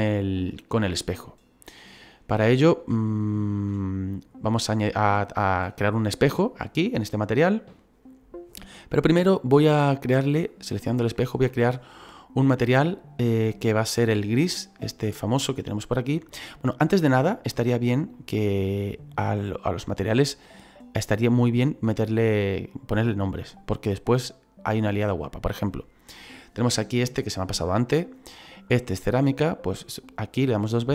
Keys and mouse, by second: 0.5 shift+middle click, 2.7 shift+middle click, 9.6 right click, 14.0 click, 17.4 click, 23.0 right click, 29.8 click.